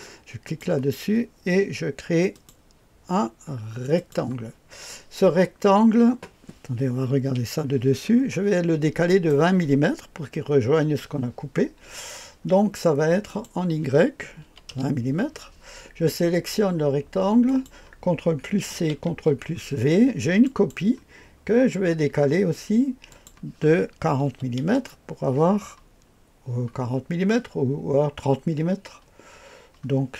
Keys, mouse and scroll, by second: 0.4 click, 2.3 click, 3.9 click, 7.0 KP_2, 8.1-8.6 scroll up 1, 9.0 middle click, 9.3 scroll up 1, 13.2 click, 14.4 KP_2, 14.7 KP_0, 17.4 click, 18.7 ctrl+c, 19.1 ctrl+v, 19.5-20.0 scroll down 1, 20.4 click, 23.1 click, 24.2 KP_4, 24.6 KP_0.